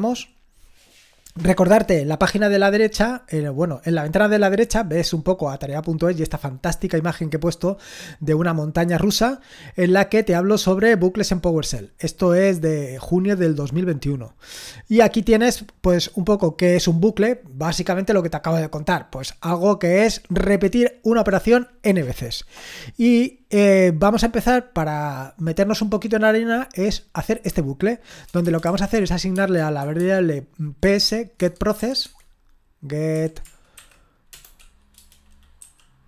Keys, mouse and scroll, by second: 3.6-4.5 scroll up 1, 4.5-6.0 scroll up 1, 6.0-8.4 scroll up 1, 8.4-9.8 scroll up 1, 9.8-10.8 scroll up 1, 10.8-11.9 scroll up 1, 11.9-13.3 scroll up 1, 13.3-15.0 scroll up 1, 15.0-16.1 scroll down 1, 16.1-20.5 scroll down 1, 20.5-23.3 scroll down 1, 23.3-24.3 scroll down 1, 24.3-25.7 scroll down 1, 25.7 click, 28.2-31.8 typing, 33.1-34.3 typing, 35.6-36.0 typing.